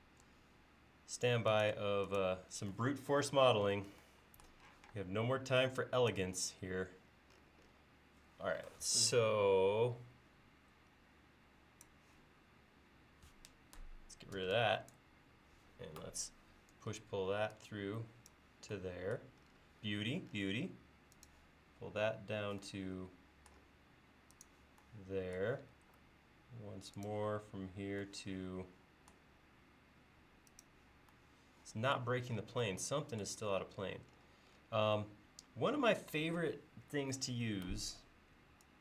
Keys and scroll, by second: 4.8 p, 14.4 e, 16.8 p, 19.9 l.